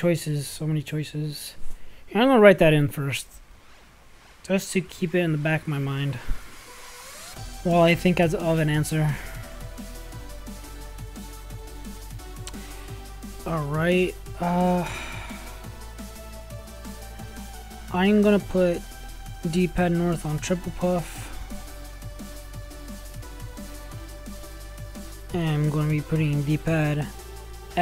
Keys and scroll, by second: 7.3 Tab, 8.5-10.7 typing.